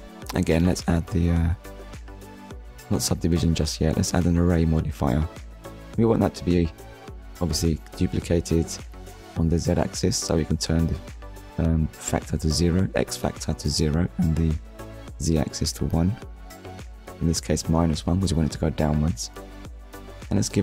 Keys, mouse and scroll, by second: 0.9 click, 2.3 middle click, 3.7 click, 4.8 middle click, 8.1 click, 8.9 KP_0, 9.2 Return, 10.2 click, 11.1 KP_1, 11.4 Return, 12.8 middle click, 15.1 click, 16.6 Return, 17.8 middle click, 20.5 scroll up 1.